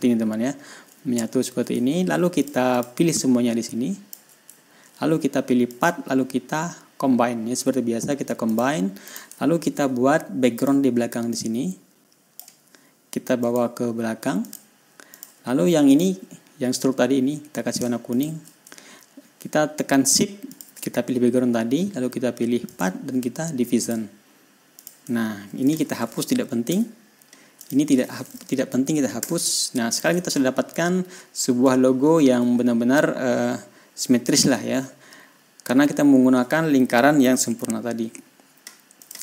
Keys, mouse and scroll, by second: 0.3-1.0 shift+scroll down 4, 1.0-1.3 ctrl+scroll up 1, 2.3-2.6 ctrl+scroll down 1, 2.9 ctrl+click, 3.2 ctrl+click, 3.6-4.7 ctrl+drag, 5.1 ctrl+scroll up 2, 6.2 click, 8.9 click, 9.5 click, 9.8-11.0 ctrl+scroll down 3, 11.0 click, 11.8-13.0 drag, 13.9 click, 14.9 click, 15.6 click, 16.4 click, 18.6 shift+click, 21.0 shift+click, 23.1 click, 24.3 click, 25.2 click, 26.1 ctrl+click, 27.1 Delete, 28.1 click, 29.6 Delete, 30.4 ctrl+click, 30.8 ctrl+scroll down 2, 31.3 ctrl+scroll up 1, 31.5-32.8 ctrl+scroll down 1, 33.3 ctrl+scroll up 1, 33.5-34.2 ctrl+scroll down 1, 34.2 ctrl+scroll up 1.